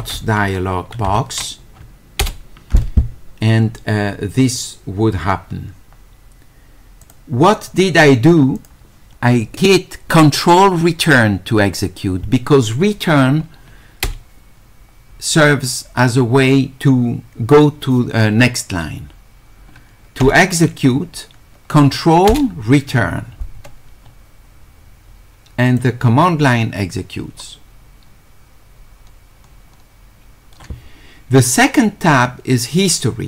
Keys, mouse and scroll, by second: 7.0 click, 8.6 click, 25.7 click, 32.8 click.